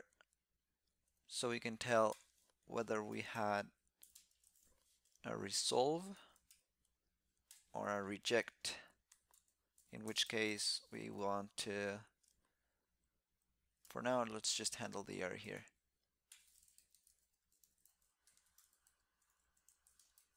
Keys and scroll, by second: 5.3 alt+c, 13.8 alt+ç.